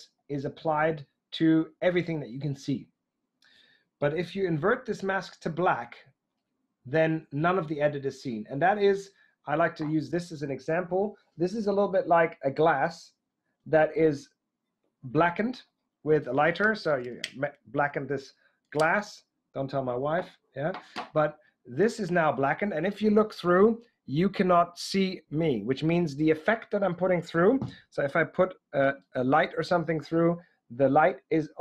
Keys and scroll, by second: 4.6 Right.